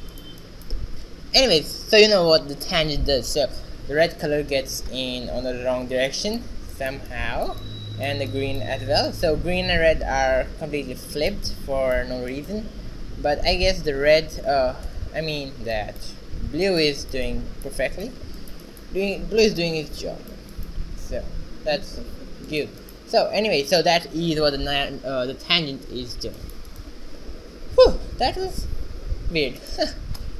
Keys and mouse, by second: 10.9 right click, 11.4 r, 13.4 click, 19.2-20.2 right drag, 19.4 g, 20.2 middle click, 21.7 a, 23.2 shift+z, 26.6 right click, 26.7 g, 29.2-30.3 right drag, 29.8 alt+g.